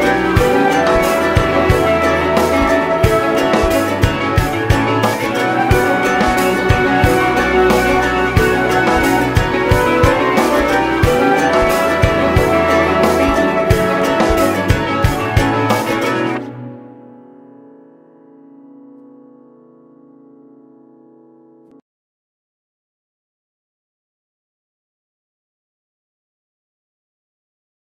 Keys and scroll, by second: 9.3 ctrl+d, 9.7 ctrl+space.